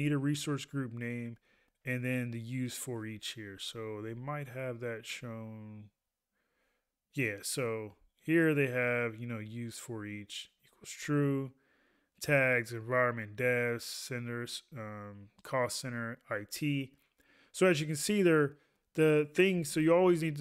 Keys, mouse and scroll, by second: 0.0 ctrl+a, 1.7 ctrl+a, 8.9 ctrl+a, 19.7 ctrl+a.